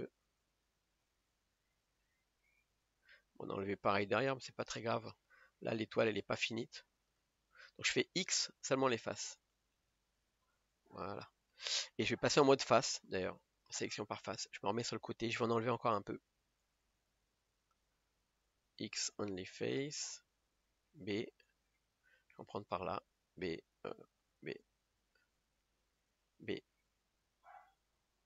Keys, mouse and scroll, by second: 1.1 b, 1.5-1.9 scroll down 5, 2.1-3.4 middle drag, 3.4-4.1 scroll up 1, 4.1-5.1 middle drag, 5.1 KP_0, 6.2 middle click, 7.0 scroll up 2, 7.2-9.7 middle drag, 9.7 x, 10.5-12.7 middle drag, 12.7 click, 14.4 KP_1, 17.5 b, 19.5 x, 22.4 b, 27.4 b.